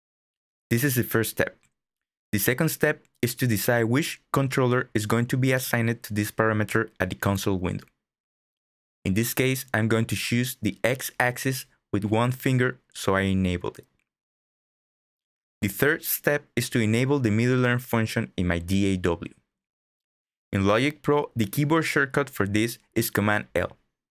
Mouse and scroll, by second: 8.9 click.